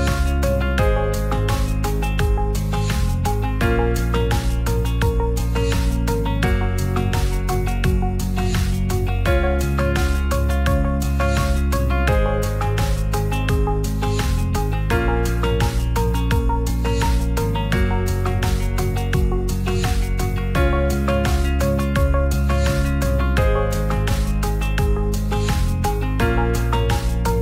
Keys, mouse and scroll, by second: 0.8 s, 0.9 z, 2.1 ctrl+a, 3.1 f, 3.9 g, 4.0 z, 6.2 click, 7.1-9.4 shift+drag, 10.3 right click, 10.8 shift+middle click, 11.4 click, 12.8-13.6 middle drag, 13.7 ctrl+s, 14.9 middle click, 15.4 click, 16.0 KP_Divide, 17.0 shift+middle click, 17.4 s, 17.5 z, 18.3 click, 18.5 ctrl+a, 18.9 shift+middle click, 19.7-20.9 shift+drag, 21.3 middle click, 21.7 Tab, 22.9 ctrl+b, 26.2 click, 26.4 Tab, 26.8 middle drag.